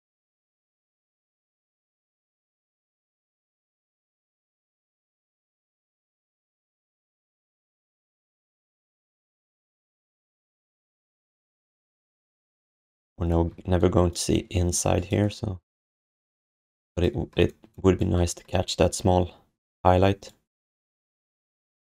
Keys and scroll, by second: 0.2 w, 3.2 alt+q, 5.1 d, 13.5 q.